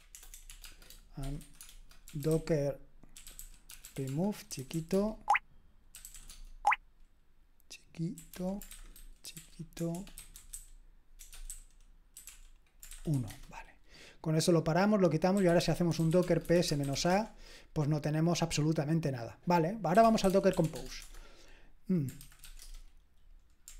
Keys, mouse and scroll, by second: 0.1-6.6 typing, 8.1-13.6 typing, 15.1-17.4 typing, 19.7-23.7 typing.